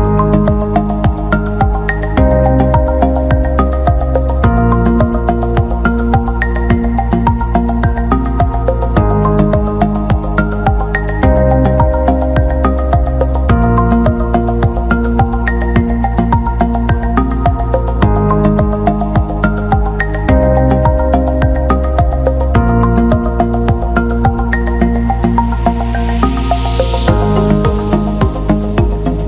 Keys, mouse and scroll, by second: 0.3 alt+shift+middle click, 1.8 click, 5.6 click, 6.2-7.4 drag, 11.0-12.9 ctrl+z, 16.0 click, 16.6-18.2 drag, 19.1 click, 20.2 shift+click, 22.7-25.2 drag, 25.2 ctrl+z, 26.0 click, 26.9-29.2 drag.